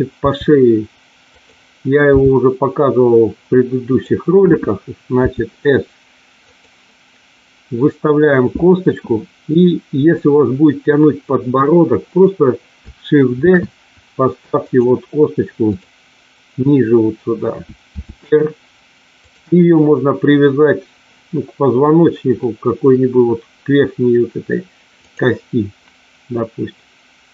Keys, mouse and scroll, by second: 0.2 r, 1.2 click, 2.1 g, 3.8 click, 5.2 s, 6.5 click, 13.3 shift+d, 14.6 click, 15.6 click, 17.8 r, 19.1 click, 25.0 click.